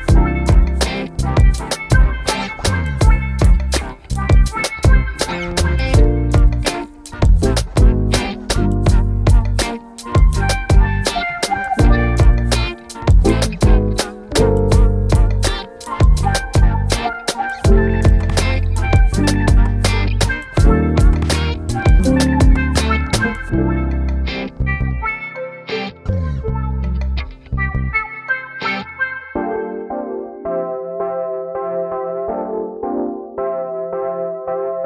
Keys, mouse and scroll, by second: 0.3 click, 3.7 click, 15.3 scroll down 1.